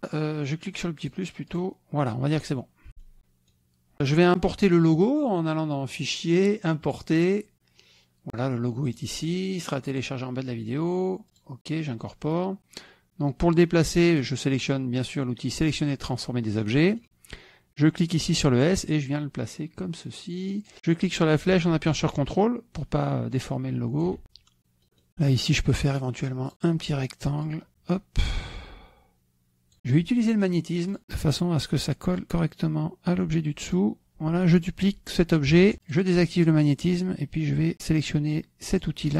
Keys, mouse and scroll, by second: 0.0 KP_Multiply, 1.9 click, 2.9 KP_Subtract, 3.2 click, 6.8 click, 7.8 click, 9.7 click, 10.8 click, 12.1 click, 17.5-19.3 middle drag, 17.5-18.1 scroll down 1, 18.1-19.3 scroll up 1, 19.3-21.2 drag, 22.0-24.2 drag, 24.3 KP_Subtract, 24.8 click, 25.6 click, 27.1 click, 28.3-29.8 drag, 30.3 click, 31.0 click, 32.2-34.8 drag, 35.7 ctrl+d, 36.7 click.